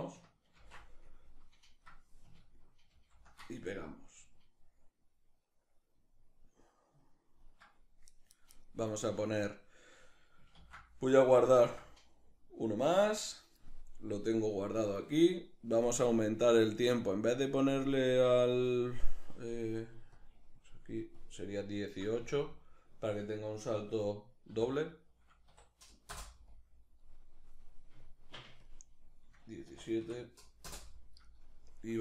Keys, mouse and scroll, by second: 2.5 ctrl+shift+v, 16.1-19.8 middle drag, 19.8 click, 21.1 click, 21.8 a, 24.2 s, 25.8 Return, 25.8-32.0 drag.